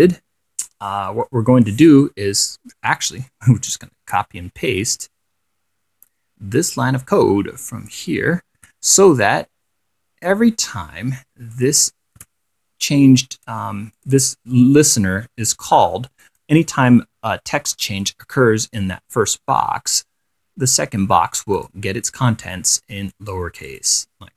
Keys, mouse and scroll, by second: 4.9-5.8 scroll up 4, 5.9 scroll down 2, 6.2 scroll up 2, 6.8-8.4 drag, 8.8 ctrl+c, 9.5-10.7 drag, 11.8 click, 12.4 ctrl+v, 13.6 click, 14.2 click, 15.3-15.7 scroll down 2, 16.5 click, 21.8 click, 23.4 click.